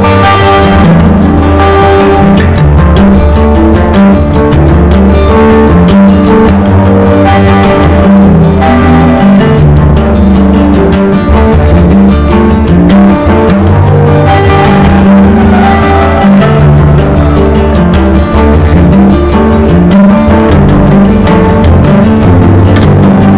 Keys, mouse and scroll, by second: 0.1 Delete, 0.7-14.8 drag, 0.8 Delete, 1.7 Delete, 18.0 F4, 18.3 click, 18.5 F4, 18.8 click, 19.0 F4, 19.3 click, 19.6 F4, 20.3-23.3 drag.